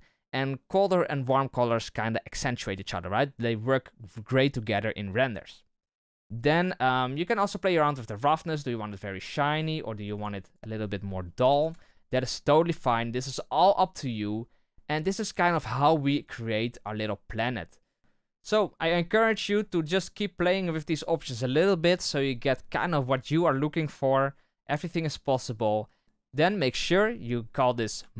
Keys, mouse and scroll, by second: 7.3-10.1 drag, 10.4-16.2 drag, 16.2-17.5 right drag, 17.5-18.0 middle drag, 24.2-24.5 scroll down 3, 26.0 right click.